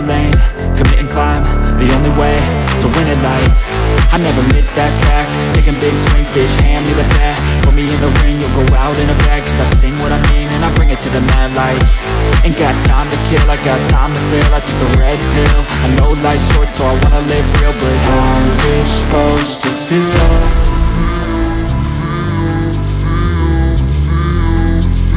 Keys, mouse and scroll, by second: 0.2 w, 1.2 click, 2.2-2.6 typing, 3.9-7.7 typing, 5.9 click, 7.3 click, 8.3 click, 9.5 z, 9.8 click, 14.5 space, 14.6 click, 15.8 ctrl+e, 16.7 click, 21.8 click, 23.2 space, 23.4 click, 23.7 space, 24.6 click.